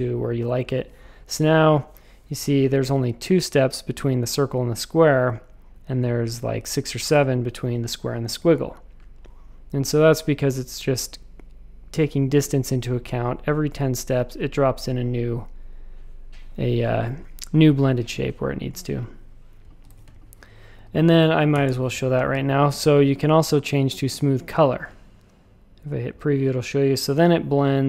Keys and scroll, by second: 19.8 shift+super+a, 20.0 space, 20.7 v, 21.5 w, 21.6 Return.